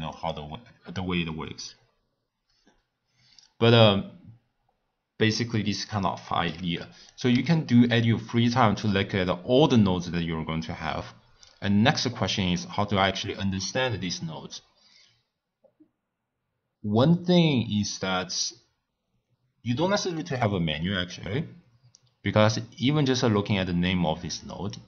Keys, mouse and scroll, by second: 0.1 click, 5.7 click, 6.8 x, 7.1 click, 7.3 shift+a.